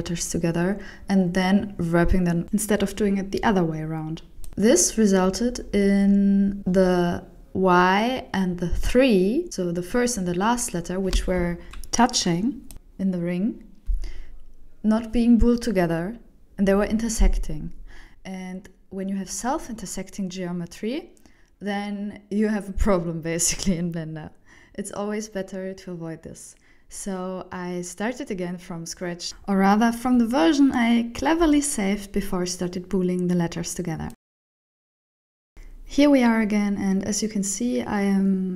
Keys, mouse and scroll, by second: 0.0 alt+a, 0.1 ctrl+alt+shift+m, 0.2 Tab, 0.4 shift+middle click, 0.6 click, 1.1 click, 1.4 click, 1.6 click, 2.1 shift+middle click, 2.2 click, 2.4 Tab, 2.5 alt+a, 2.7 ctrl+alt+shift+m, 2.8 Tab, 3.2 click, 3.3 click, 3.7 click, 4.1 click, 4.3 click, 4.8 click, 4.9 shift+middle click, 5.3 click, 5.8 click, 6.1 click, 6.4 click, 6.8 click, 6.9 shift+middle click, 7.1 click, 7.4 click, 7.8 click, 7.9 click, 8.2 click, 8.5 shift+middle click, 8.7 click, 8.8 scroll down 5, 8.9 shift+middle click, 9.0 Tab, 9.2 alt+a, 9.3 ctrl+alt+shift+m, 10.3 shift+middle click, 10.6 Tab, 10.7 shift+middle click, 10.9 scroll down 3, 11.0 shift+middle click, 11.1 middle click, 11.3 scroll up 3, 11.4 middle click, 11.7 shift+middle click, 12.9 right click, 13.8 shift+middle click, 14.4 right click, 15.2 g, 16.5 middle click, 20.4-20.7 scroll up 2, 20.7 middle click, 21.2 shift+middle click, 21.2 scroll down 3, 21.3 shift+middle click, 21.5 middle click, 22.4 right click, 23.3 middle click, 24.4-24.9 scroll up 3, 25.2 right click.